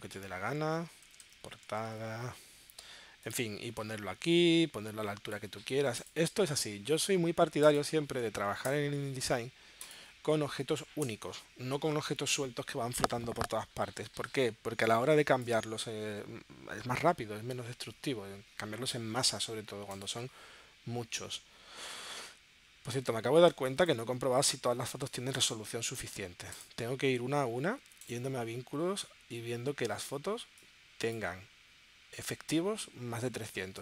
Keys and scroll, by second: 0.8-2.3 typing, 8.7 BackSpace, 11.0 BackSpace, 15.1 space, 24.1 space, 24.9 space, 25.5 space, 33.7 space.